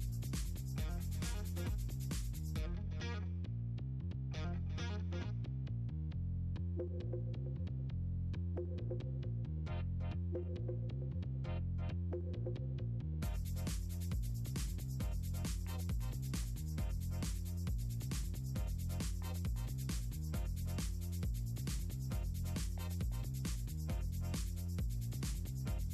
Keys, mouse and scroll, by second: 0.5 click, 3.1 click, 3.7 shift+click, 4.2 click, 5.4 click, 5.7 click, 6.3 shift+click, 7.9 ctrl+click, 8.9-10.3 shift+drag, 10.7 Return, 18.0 ctrl+z, 19.6 click, 20.1 click, 20.5 click, 21.0 click, 21.9 click, 22.0 click, 22.6 right click, 23.9 click, 24.2 click, 24.5 click, 25.1 click, 25.2 click, 25.6 click.